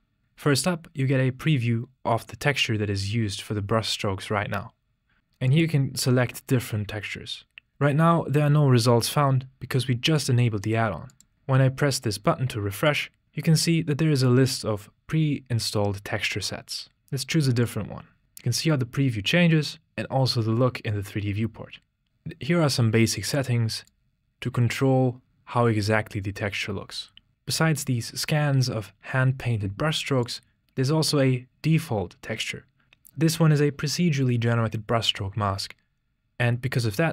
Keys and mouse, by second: 5.6-10.1 drag, 11.2 click, 12.9-18.1 drag, 22.1-23.4 drag, 24.0-27.3 drag, 30.3-32.8 drag.